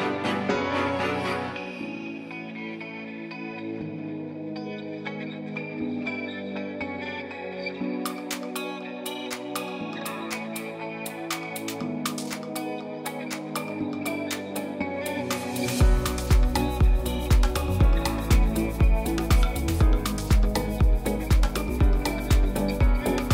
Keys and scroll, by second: 2.3 space, 5.6 space, 7.8 space, 10.2 space, 10.4 super+s, 13.3 space, 13.4 space, 13.7 space, 14.0 [, 15.6 space, 16.4 space, 19.7 space, 19.9 ], 21.0 space, 21.6 super+z, 23.0 space.